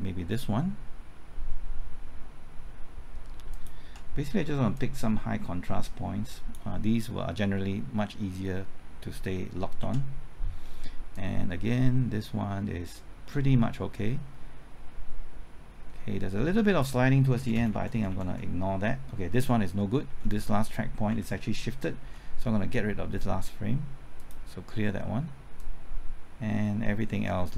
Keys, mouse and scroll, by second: 0.3 typing, 3.5 ctrl+click, 4.7-7.3 drag, 9.3 typing, 9.8 ctrl+t, 11.1-17.3 drag, 17.3 Right, 17.5-18.1 typing, 20.1 Left, 21.1 Right, 22.0 Left, 24.2-27.5 drag.